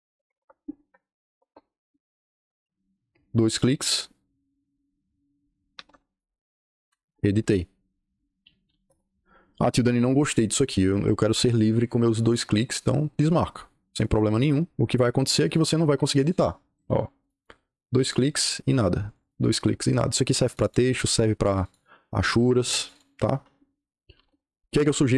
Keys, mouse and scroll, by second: 0.0-0.7 typing, 1.2 KP_Enter, 3.2 click, 3.4 click, 5.5-6.7 typing, 6.8 Return, 7.0 Return, 8.3-9.2 typing, 12.9 click, 13.8 click, 15.2 click, 15.3 click, 16.1 click, 16.3 click, 17.1 click, 17.2 click, 17.9 click, 18.1 click, 19.0 click, 20.4 click, 20.6 click, 21.4 click, 21.9-22.4 scroll, 22.7 click, 22.9 click, 23.1-24.0 scroll, 23.8-24.6 typing.